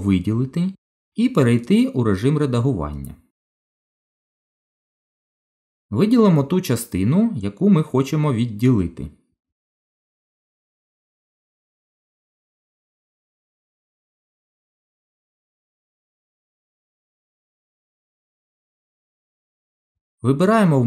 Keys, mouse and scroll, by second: 0.4 click, 2.5 Tab, 4.8 KP_1, 7.4 click, 10.3 middle click, 12.8 shift+click, 13.3 shift+click, 14.2 middle click, 15.5 shift+click, 17.1 KP_1.